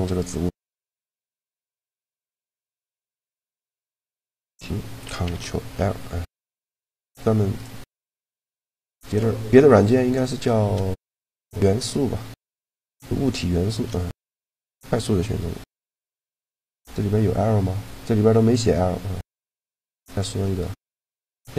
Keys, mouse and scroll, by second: 0.0 middle click, 0.9 a, 1.8-3.6 right drag, 3.7 g, 5.0 ctrl+l, 10.9 a, 16.2-18.1 drag, 20.2 middle click, 21.1 a.